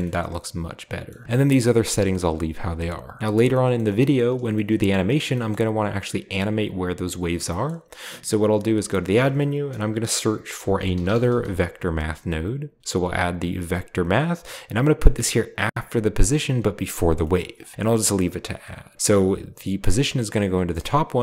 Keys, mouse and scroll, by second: 1.1 middle click, 1.2 scroll up 1, 3.2-3.7 middle drag, 3.8 middle drag, 4.2-4.5 shift+middle drag, 4.6 scroll up 1, 5.0 middle click, 5.3 shift+middle click, 5.3 shift+scroll up 1, 5.6-6.4 shift+scroll down 1, 7.5-8.2 middle drag, 8.7 shift+a, 9.2-10.2 shift+drag, 10.6-11.3 typing, 12.8 typing, 14.0 click, 16.7-18.7 drag, 17.7-18.1 middle drag, 17.7-18.4 scroll up 1, 18.9-19.7 scroll up 1, 19.7 click.